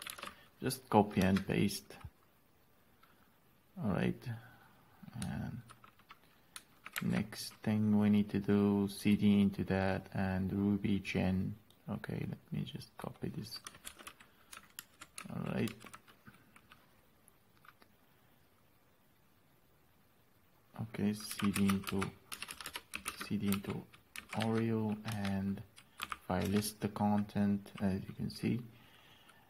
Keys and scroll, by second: 0.6 ctrl+v, 1.7 Return, 7.4 alt+é, 10.0 alt+é, 14.3 ctrl+c, 15.2 alt+&, 16.1 alt+s, 21.7-26.9 typing.